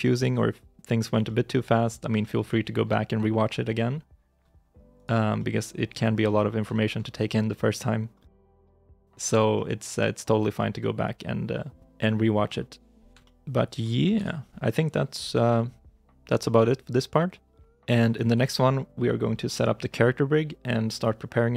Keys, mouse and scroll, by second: 1.1 middle click, 1.5-2.0 scroll up 1, 2.0 shift+middle click, 4.8 right click, 5.2 middle click, 5.8 scroll down 1, 6.1 middle click, 6.6 shift+middle click, 7.6 middle click, 8.0 scroll up 1, 8.4 shift+middle click, 9.2 middle click, 9.2 shift+scroll down 2, 9.4 middle click, 9.8 shift+middle click, 10.3 right click, 10.6 middle click.